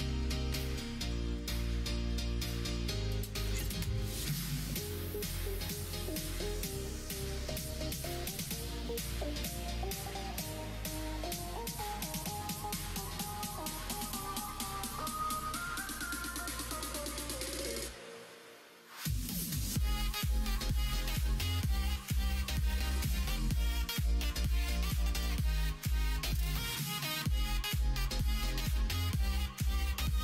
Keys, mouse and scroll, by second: 0.5 1, 1.5-2.5 middle drag, 3.7 s, 5.7 2, 6.1 click, 6.9 ctrl+b, 12.8 click, 13.4 2, 13.8 click, 15.2 g, 17.4 ctrl+z, 17.9 shift+click, 18.2 shift+click, 18.9 g, 20.9 middle click, 22.2 click, 22.8 shift+click, 23.5 g, 25.3 ctrl+z, 26.0 r, 27.8 ctrl+z, 29.3 shift+click.